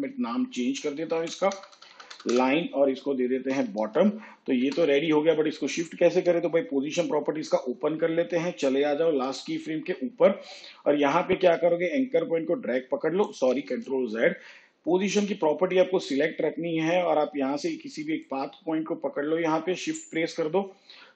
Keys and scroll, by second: 1.1 Right, 1.4 BackSpace, 2.6-3.5 typing, 4.5 Return, 13.6 ctrl+z.